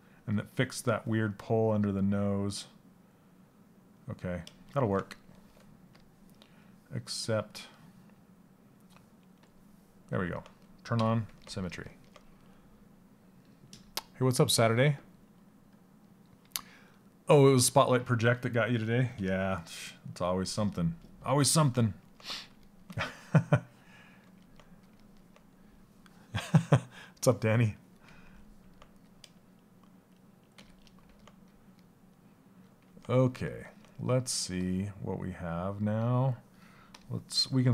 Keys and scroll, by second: 30.1 shift+f.